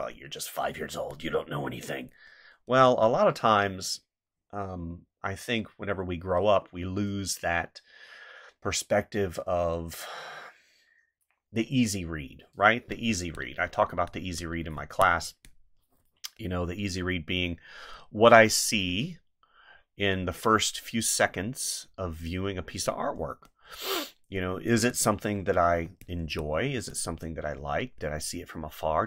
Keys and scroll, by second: 0.9 space, 2.8 space, 13.1 space, 14.7 space, 23.3 space, 24.8 space.